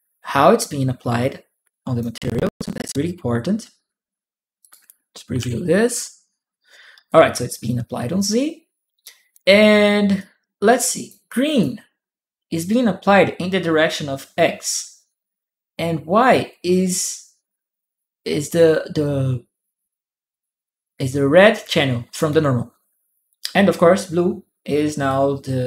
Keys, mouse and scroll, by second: 4.4 click, 5.2 shift+p, 6.9-9.1 shift+drag, 6.9 p, 9.9 click, 11.1 click, 24.8 click.